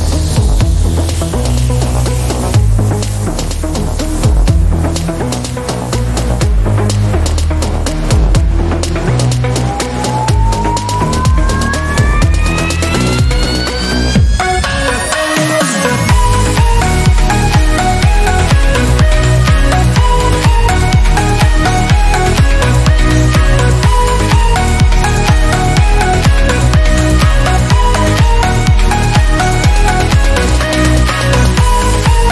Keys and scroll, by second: 6.6-7.1 typing, 19.2 ctrl+alt+d, 31.0 BackSpace, 31.8 BackSpace, 32.2 1.